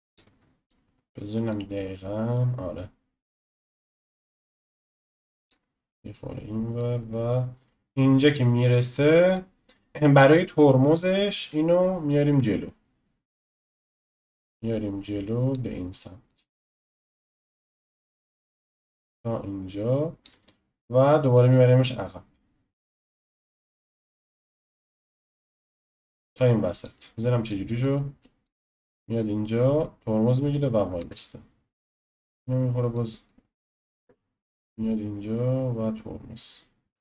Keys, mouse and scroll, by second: 0.7-4.3 shift+middle drag, 4.3 click, 6.8-8.9 drag, 8.9-12.1 shift+middle drag, 12.1 click, 14.2 click, 16.3-21.4 drag, 23.2-24.9 middle drag, 24.9 click, 27.4-28.6 drag, 28.6 space, 31.0 space, 31.9 click, 32.4 click, 33.3-34.0 drag, 34.0 space.